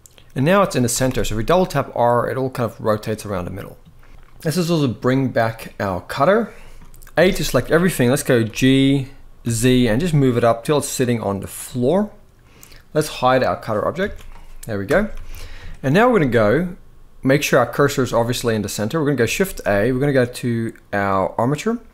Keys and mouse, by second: 0.6 r, 0.8 r, 2.8-3.9 right drag, 5.7 click, 6.9 a, 8.2 g, 9.2 z, 11.4-12.2 middle drag, 13.2 click, 13.8 alt+a, 14.6 KP_1, 14.8 ctrl+s, 15.0 ctrl+s, 15.4 shift+middle click, 17.5 shift+middle click, 19.1 shift+a.